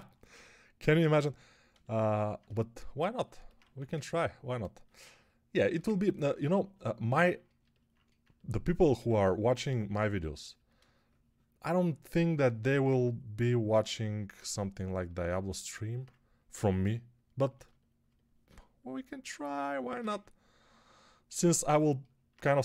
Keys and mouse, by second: 0.2 g, 3.5 1, 8.8 x, 22.5-22.6 typing.